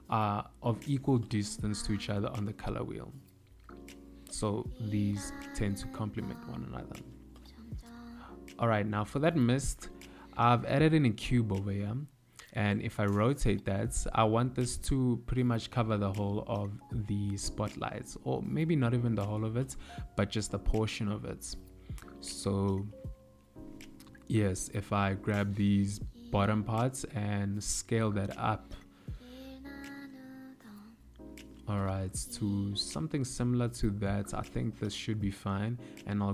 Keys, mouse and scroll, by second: 1.7 shift+s, 4.0 shift+a, 8.2 click.